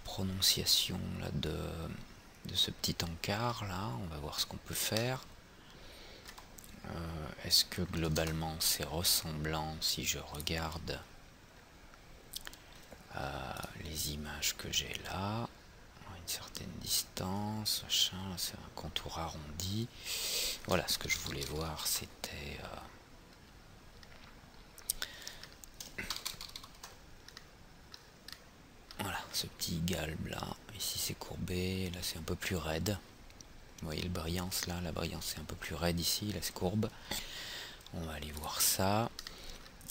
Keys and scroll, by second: 8.2 alt+Tab.